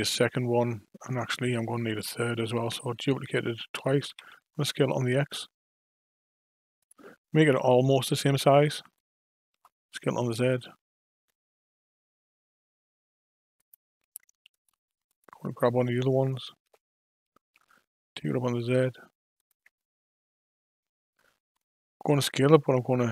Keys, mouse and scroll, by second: 1.5 shift+d, 4.1 s, 9.5 s, 14.5 click, 15.1 click, 16.6 g, 22.1 s.